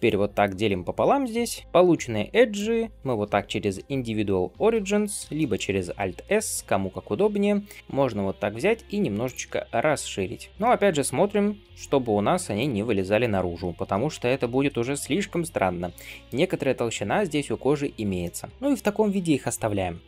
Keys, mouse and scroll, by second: 1.6 ctrl+r, 1.6 alt+shift+click, 1.7-3.6 middle drag, 4.4 ., 5.2 shift+middle click, 6.0 alt+s, 9.5-10.5 middle drag, 11.3 alt+s, 12.8-14.1 middle drag, 14.3 ctrl+z, 14.7-17.7 middle drag, 17.7 scroll down 1, 18.1 shift+middle click, 18.5-20.0 middle drag, 18.5-19.3 scroll up 2.